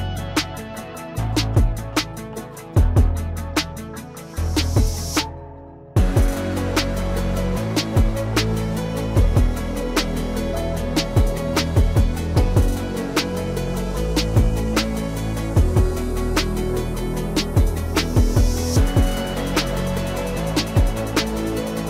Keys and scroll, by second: 4.8 F3, 18.2 F3.